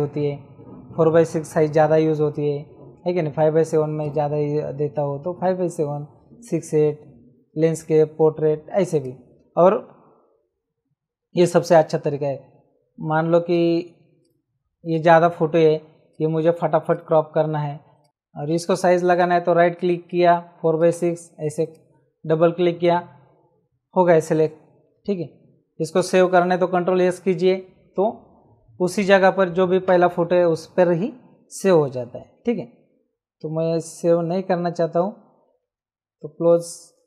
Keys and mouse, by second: 2.2 click, 4.0 right click, 9.0 click, 13.4 click, 16.1 click, 16.9 ctrl+shift+click, 18.0 click, 18.5 c, 19.1 right click, 20.1 click, 35.6 ctrl+w, 36.4 click.